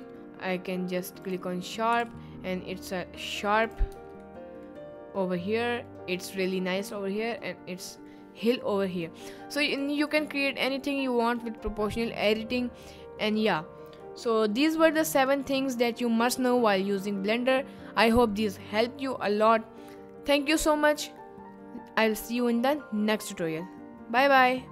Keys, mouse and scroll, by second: 1.9 g, 3.6 click, 3.6 z, 3.9 Tab, 4.4 middle drag, 5.7 middle click, 7.0 middle click, 8.0 middle drag, 9.1 middle drag, 9.7 click, 10.6 middle click, 14.2-15.2 middle drag.